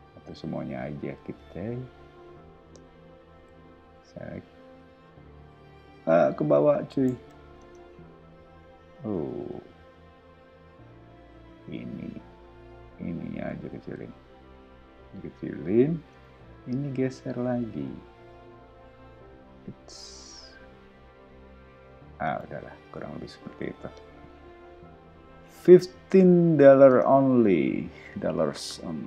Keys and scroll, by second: 3.3 s, 6.2 ⟲, 7.1 super+z, 7.6 space, 8.9 p, 9.3 o, 10.7 space, 13.3 s, 16.1 space, 17.7 m, 22.2 space, 22.8 ⟲, 23.6 o, 26.9 space.